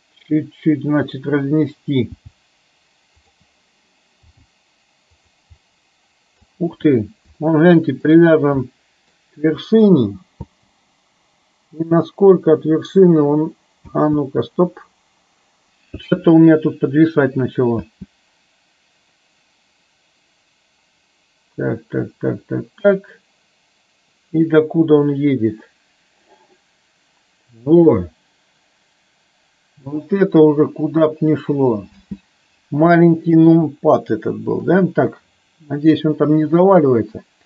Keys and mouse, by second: 1.2 click, 2.3 g, 4.4 g, 5.7 middle click, 7.5 shift+middle click, 8.8 middle click, 10.6 space, 14.3 space, 18.2 space, 32.1 space, 33.2 shift+middle click.